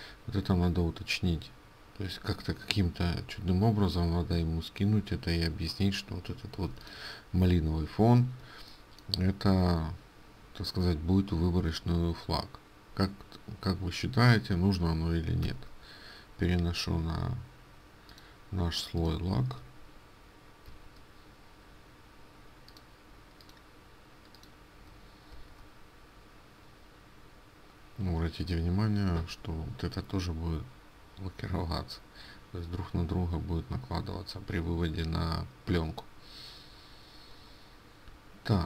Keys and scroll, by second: 15.5 ctrl+x, 20.8 ctrl+f.